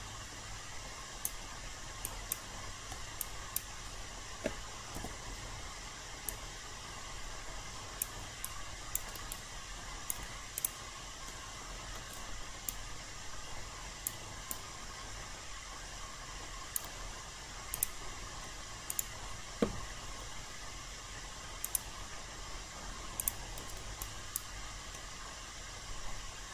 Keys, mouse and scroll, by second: 8.1 click, 8.4 alt+click, 9.3-10.6 right drag, 10.6 click, 11.3 alt+middle click, 12.6-17.5 right drag, 17.7 click, 18.9 shift+click, 21.6 click, 24.0 alt+right click, 24.9-26.5 alt+middle drag.